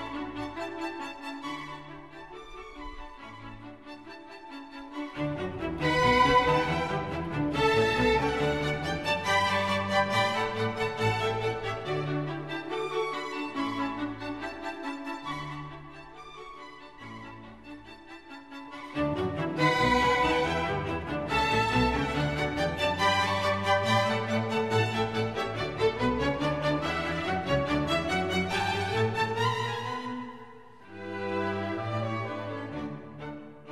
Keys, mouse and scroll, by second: 11.6 ctrl+j, 20.5 ctrl+z, 25.8 Delete, 27.5 ctrl+d.